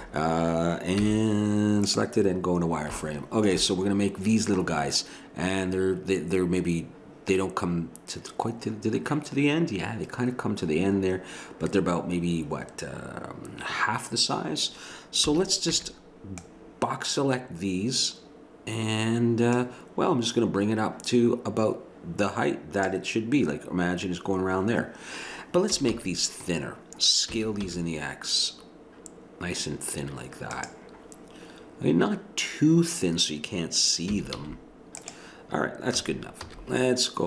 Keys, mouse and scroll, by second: 1.0 z, 15.3 a, 15.8 b, 19.5-22.2 drag, 25.7 a, 25.9 a, 27.3 s, 34.1 s, 36.0 a, 36.5 z.